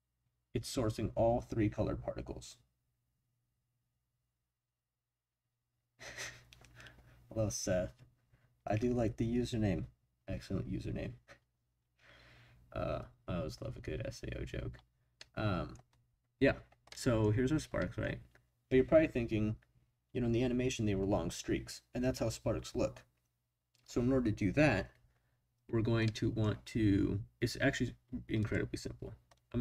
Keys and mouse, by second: 15.2-15.7 middle drag, 16.8-17.2 middle drag, 17.8 middle click, 26.0 middle click, 28.4 click.